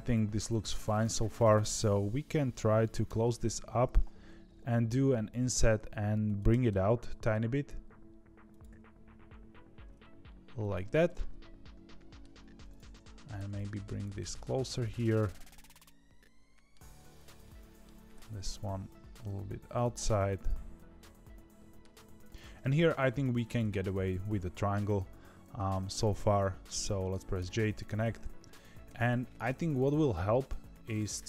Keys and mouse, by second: 0.5 2, 0.8 alt+click, 3.0 f, 4.4 ctrl+z, 5.0 i, 6.4 g, 8.6 s, 11.0-12.1 middle drag, 12.6 click, 12.9 middle click, 13.3 g, 15.4-16.7 middle drag, 17.4 middle click, 17.9 g, 19.9-21.8 middle drag, 21.9 2, 23.4 click.